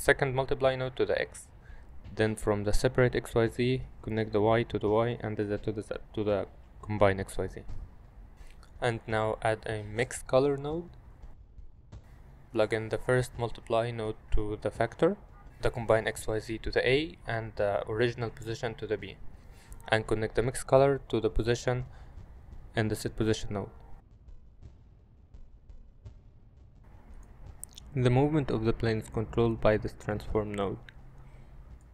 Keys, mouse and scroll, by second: 2.2 click, 2.3-3.3 drag, 4.2-4.8 drag, 7.9 middle click, 8.3 shift+a, 14.1 click, 14.4-15.3 drag, 15.9-16.7 drag, 17.3 click, 17.5-18.3 drag, 18.5 middle click, 19.6 click, 24.2 g, 25.3 g, 25.9 ctrl+z, 30.2-31.9 drag.